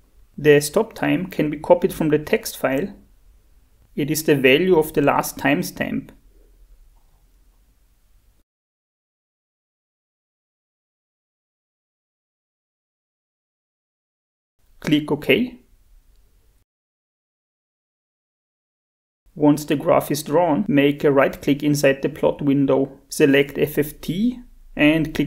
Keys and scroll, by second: 24.6 shift+F4.